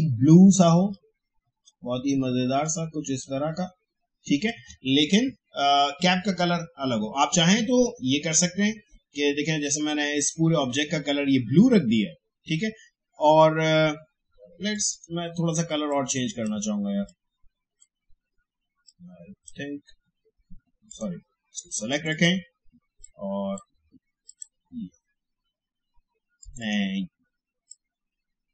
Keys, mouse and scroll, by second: 14.7-28.5 drag.